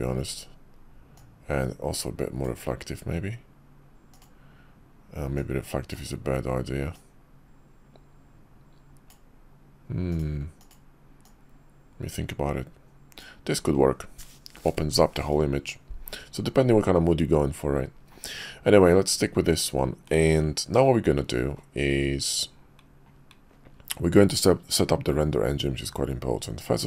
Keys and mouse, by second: 1.2 click, 2.0 click, 6.9 click, 7.5-9.1 drag, 10.2 click, 10.6 click.